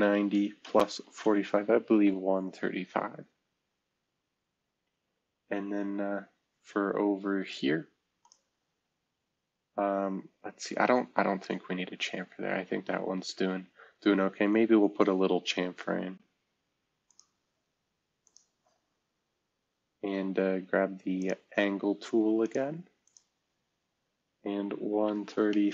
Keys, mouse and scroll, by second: 0.0-1.2 typing, 1.9 Return, 3.8-4.3 scroll down 2, 4.9 scroll down 1, 5.6 scroll down 2, 6.1 scroll up 2, 6.6 scroll up 2, 10.9-11.9 scroll down 2, 11.9-13.0 scroll up 2, 13.0-13.7 scroll up 1, 13.7 scroll down 2, 14.6-15.0 scroll up 2, 15.4 scroll down 2, 15.8-16.3 scroll up 4, 17.0 click, 18.8 Escape, 24.9-25.4 typing.